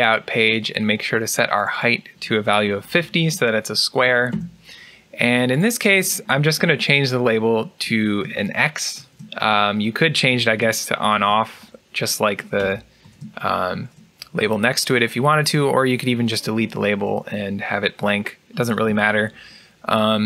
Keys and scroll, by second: 4.0-4.7 typing, 8.8 x, 10.2 BackSpace, 20.0-20.2 typing.